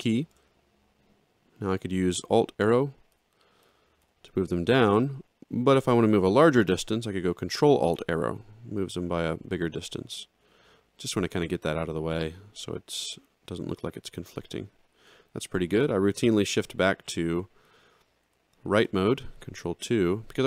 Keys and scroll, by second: 2.6 alt+Down, 7.5 ctrl+alt+Down, 10.1 ctrl+alt+Up, 10.5 ctrl+alt+Down, 18.9 ctrl+2.